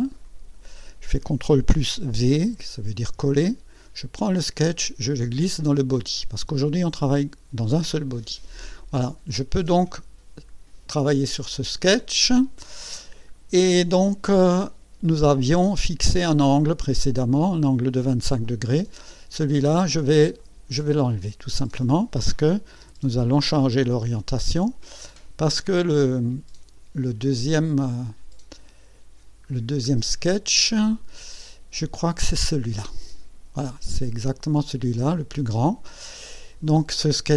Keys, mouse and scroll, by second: 0.2 click, 2.3 ctrl+v, 4.2-6.0 drag, 9.7 click, 11.4 scroll up 1, 12.4 scroll up 1, 13.0-14.3 scroll down 1, 14.3-15.1 scroll up 1, 16.5-17.5 drag, 18.4 click, 20.4 click, 21.5 click, 22.8 Delete, 24.9-27.0 drag, 28.0-29.4 drag, 29.5 scroll down 1.